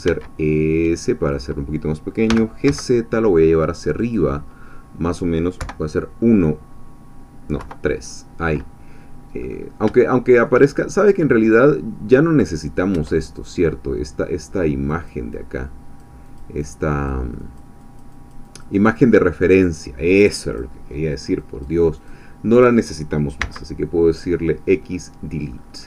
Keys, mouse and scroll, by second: 0.0 s, 1.3 click, 2.3 g, 2.7 z, 4.0-5.2 drag, 4.3 middle click, 5.6 KP_1, 7.6 KP_3, 9.4-9.8 scroll up 2, 10.0 shift+middle click, 10.7-12.9 shift+scroll down 2, 13.0 Tab, 13.5 click, 14.2-14.9 scroll down 1, 14.9 click, 15.5-16.6 drag, 16.7-17.8 drag, 17.8-19.0 drag, 19.2-19.7 scroll up 1, 20.2 click, 21.6 click, 22.1 click, 23.4 x, 24.1 click, 25.6-25.8 scroll up 1.